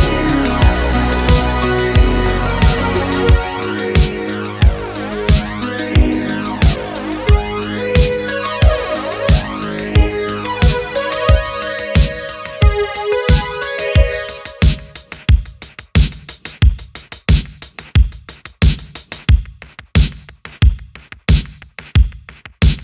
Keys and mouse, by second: 5.4 alt+p, 7.9 click, 8.5-11.6 shift+drag, 12.2 click, 14.3 alt+p, 16.8 n, 17.8 shift+middle drag, 18.1 middle drag, 18.9 middle click, 19.9 middle click, 20.8 click, 21.4 middle click, 22.3 shift+click, 22.6 middle drag.